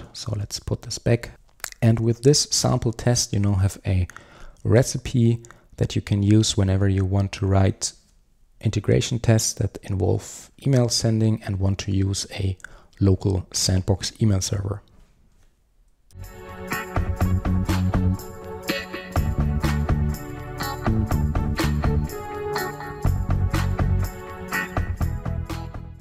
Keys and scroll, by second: 0.2 super+z.